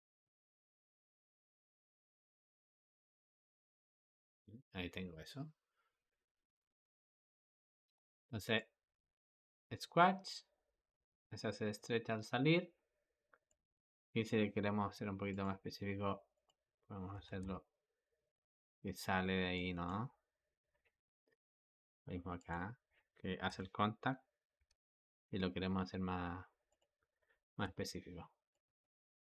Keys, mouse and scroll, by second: 0.0 click, 7.9 Escape, 8.4-11.4 drag, 15.1 click, 16.2 click, 17.0 g, 20.9 i, 22.2-23.3 drag, 23.3 g, 27.5 i, 28.4-29.3 drag.